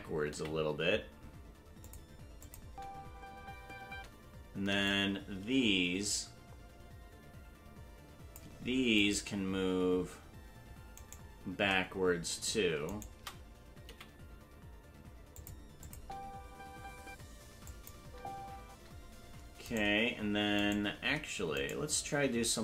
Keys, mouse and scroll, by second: 0.3 g, 2.4 click, 2.6 space, 4.4 space, 4.8-8.4 drag, 9.2 right click, 12.9 shift+right click, 13.8 g, 15.8 click, 15.9 space, 17.5 space, 17.6 click, 18.0 space, 19.9 right click, 19.9 space, 21.8 right click.